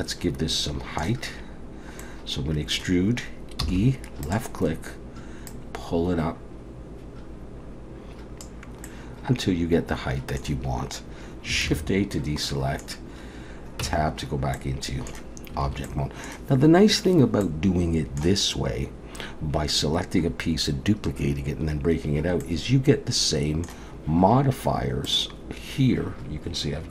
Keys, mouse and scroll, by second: 1.6-3.7 scroll down 2, 2.0 middle click, 3.7 e, 5.5 click, 8.9 middle click, 11.7 alt+a, 12.4 middle click, 13.8 Tab, 14.6 middle click, 15.7 alt+a, 15.8 middle click, 17.4 middle click, 18.6-20.5 scroll up 2, 22.4 middle click, 25.0 click.